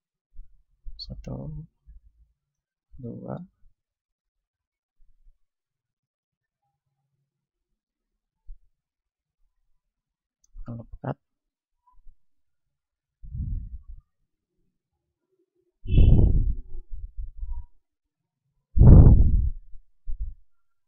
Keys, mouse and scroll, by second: 0.9-5.0 drag, 1.4 e, 2.9-5.2 middle drag, 4.2 s, 5.2-7.8 drag, 9.1 ctrl+r, 10.3-12.4 drag, 11.4 a, 12.0 ctrl+Tab, 14.3 a, 14.6 a, 15.6 b, 17.4-19.2 middle drag, 18.0 b, 19.2-20.8 drag, 20.6 a.